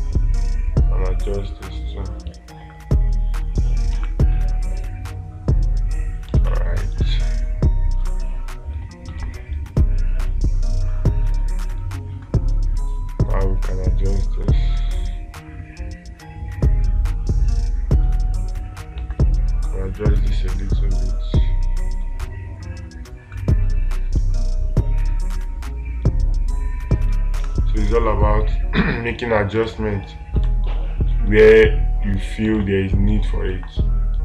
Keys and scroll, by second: 6.8 space, 8.5 space, 9.6 space, 27.9 space, 30.0 space, 30.9 space, 33.0 space.